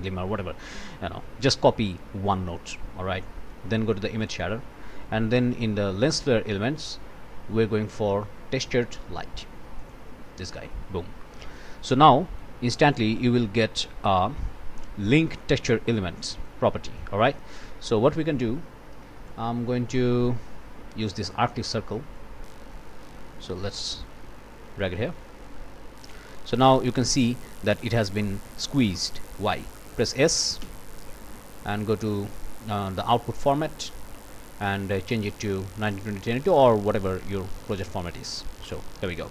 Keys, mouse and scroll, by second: 0.8 click, 4.1 click, 5.5 click, 9.8 click, 11.2 click, 11.9 click, 13.8-16.6 drag, 16.9-18.2 drag, 19.3 click, 21.2 click, 21.5 middle click, 22.1-23.9 drag, 25.4 click, 28.2 click, 28.9 click, 30.6 s, 31.7 click, 37.7 click, 38.6 click.